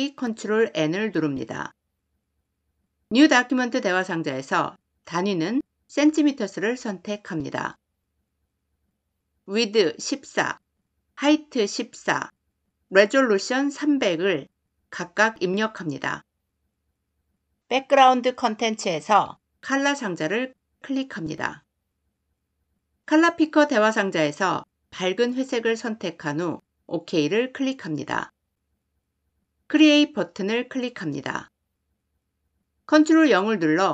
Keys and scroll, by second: 32.7 ctrl+0.